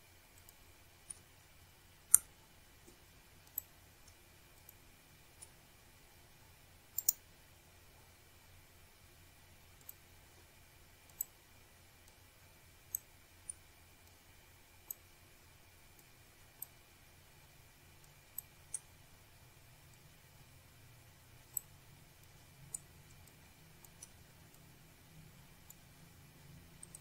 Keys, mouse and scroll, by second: 1.3 click, 1.7-2.1 scroll down 1, 3.3 click, 4.7 click, 5.8 shift+right click, 6.5 click, 7.1-7.5 scroll up 1, 8.7 scroll down 1, 8.9 scroll up 1, 10.2 click, 11.4 shift+click, 13.5 shift+click, 15.4 shift+click, 17.1 Delete, 18.4 click, 19.4 shift+click, 21.7 right click, 24.4 click, 25.6 click, 26.6 click.